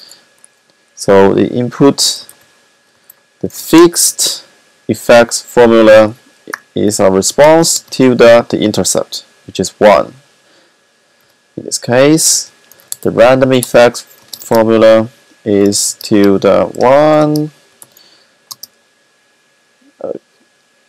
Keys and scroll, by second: 1.7-3.5 typing, 6.2-6.9 typing, 8.6 typing, 10.8-11.6 typing, 12.7-14.3 typing, 16.4 typing, 17.8 alt+7, 18.6 alt+7, 20.5 typing.